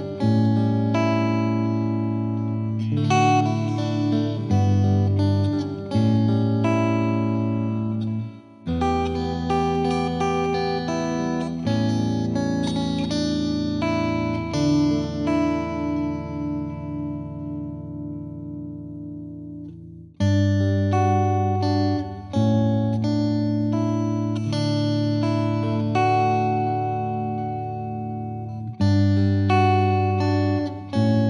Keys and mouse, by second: 1.8 Escape, 5.6-6.7 drag, 7.2 Escape, 7.6 F3, 7.9 F3, 9.9-11.6 drag, 11.2 F2, 13.0-14.3 drag, 14.5-18.2 drag, 19.6 click, 20.7 click, 30.2 click.